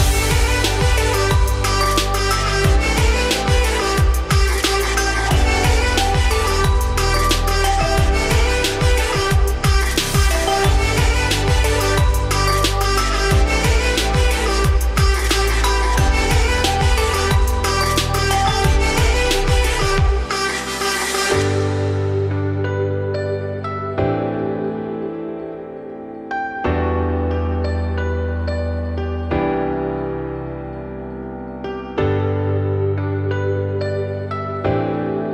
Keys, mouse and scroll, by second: 2.2-2.7 scroll up 3, 2.7-3.5 shift+middle drag, 3.5-5.3 scroll up 2, 5.3 scroll down 2, 5.5-5.8 middle drag, 5.8 scroll up 1, 6.0-6.4 shift+middle drag, 6.4 click, 6.6-7.6 middle drag, 7.6 Tab, 8.0 3, 8.1 click, 8.6 shift+s, 8.9 Tab, 9.1-10.8 middle drag, 10.8 shift+a, 12.5-12.9 scroll down 2, 12.9 `, 13.2-13.6 scroll up 3, 13.6 `, 14.0 scroll up 2, 14.2 Tab, 14.8 r, 19.7 r, 20.3 1, 20.9 r, 24.7 s, 25.9 Tab, 26.4 g, 28.1-28.7 scroll down 4, 28.7 scroll up 2, 28.9 Tab, 29.3 scroll down 2, 29.5 middle click, 29.9-30.2 scroll up 4, 30.2 shift+middle click, 30.6 scroll up 1, 31.2 f, 31.5 middle click, 31.8 e, 35.0 middle click, 35.2-35.3 scroll up 1.